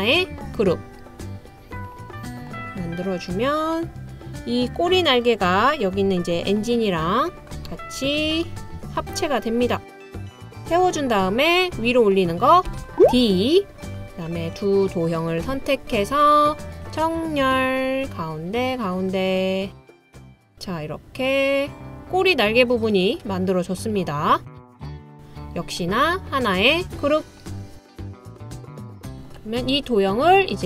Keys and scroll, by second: 12.7 d.